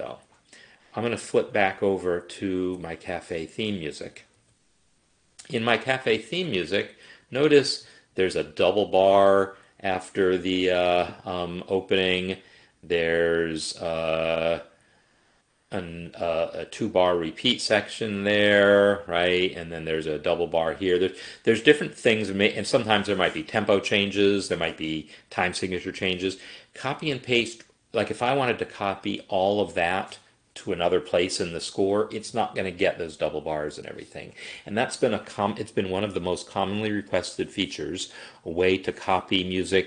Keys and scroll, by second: 4.3 Home.